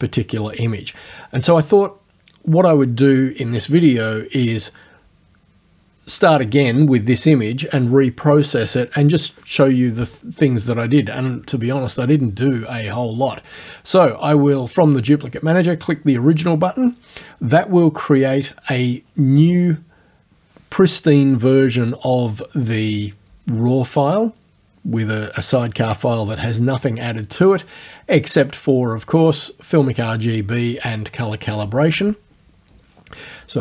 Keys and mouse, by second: 16.6 click, 28.3 click.